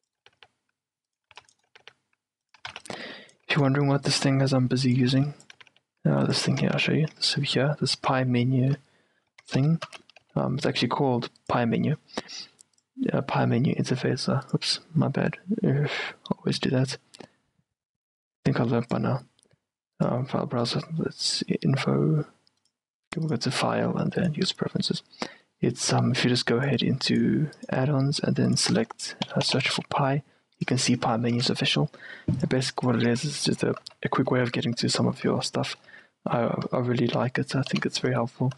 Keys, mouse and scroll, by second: 0.0-0.3 typing, 1.3-3.7 typing, 5.1 a, 5.2 c, 5.7 g, 6.5 a, 6.8 Tab, 7.3 Tab, 7.6 Tab, 8.2 Tab, 8.8 Tab, 10.0 z, 11.5-13.4 drag, 14.5-25.4 drag, 33.2-38.5 typing, 34.3 Escape, 35.8-38.5 middle drag.